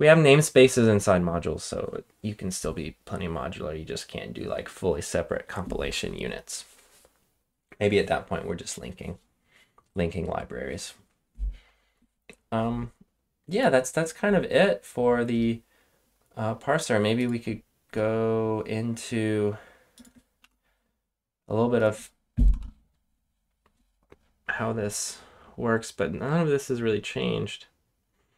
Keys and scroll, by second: 20.3 Return, 22.4 Return.